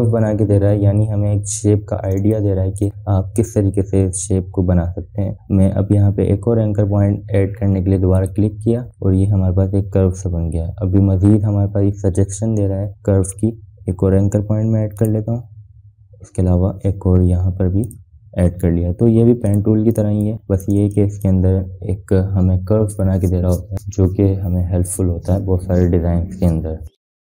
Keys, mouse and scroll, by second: 3.9 space, 4.1-4.7 click, 4.7 space, 9.8 click, 17.0 click, 19.8 click, 19.9 click, 22.8 space, 22.9-23.5 drag.